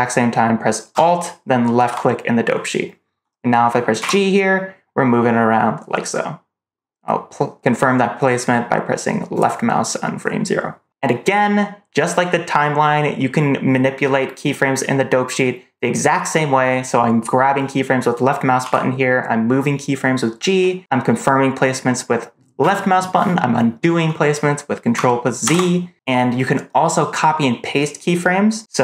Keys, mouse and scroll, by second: 1.7 alt+click, 3.9 g, 18.5 g, 25.3 ctrl+z.